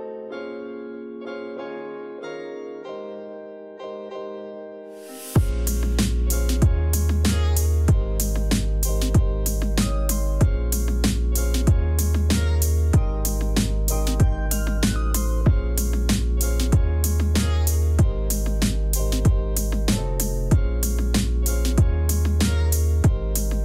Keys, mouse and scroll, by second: 0.2 ctrl+click, 0.8 ctrl+v, 1.4 ctrl+click, 2.2 ctrl+z, 8.6-9.0 scroll up 2, 9.7 ctrl+0, 13.3 [, 13.8 ctrl+z, 16.8 ctrl+alt+z, 18.1 e, 19.3 b, 23.3 [.